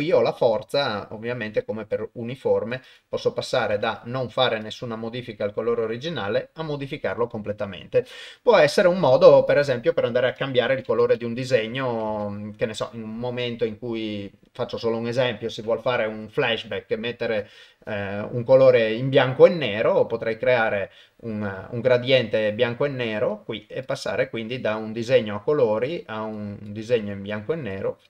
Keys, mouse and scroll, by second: 0.1-2.8 drag, 2.8 click, 4.7-7.1 drag, 9.5-11.0 drag, 11.6 click, 22.1 click, 23.1 click, 23.9 click.